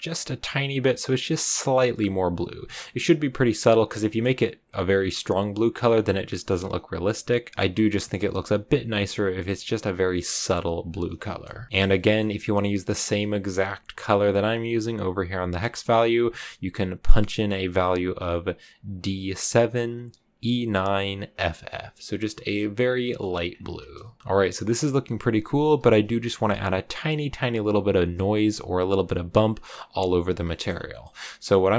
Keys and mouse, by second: 11.9 middle click, 12.1 click, 22.9 click, 23.9 shift+click, 30.4 click.